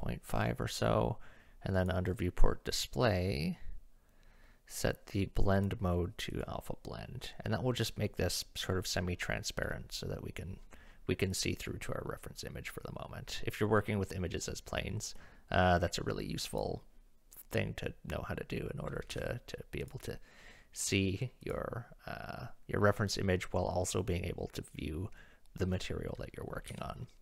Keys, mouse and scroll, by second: 1.8 right click, 5.6 right click, 11.3 click, 11.9-13.2 middle drag, 16.6 click, 19.1 KP_1, 19.8 click, 20.6-21.0 middle drag, 21.4 click, 26.7 KP_1.